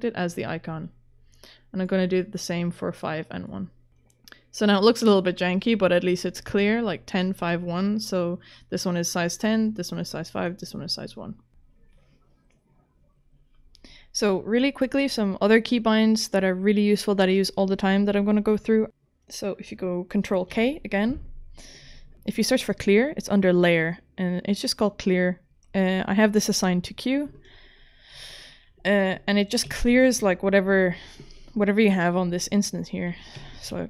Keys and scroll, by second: 20.5 ctrl+k, 29.4-30.4 typing, 33.4 q.